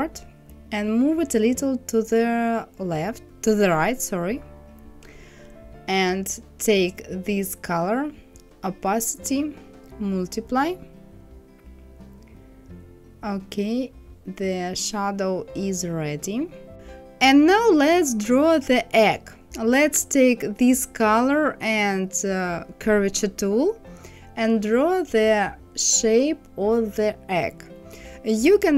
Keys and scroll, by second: 0.4 Right.